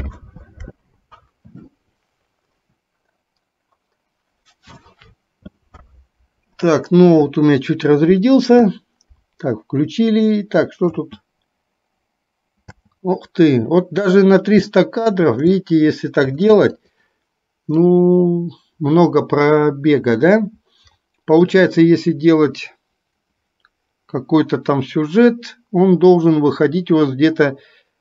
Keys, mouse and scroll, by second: 11.0 space, 12.7 space, 14.7-15.2 shift+middle drag, 16.5 shift+d, 18.0-21.7 drag.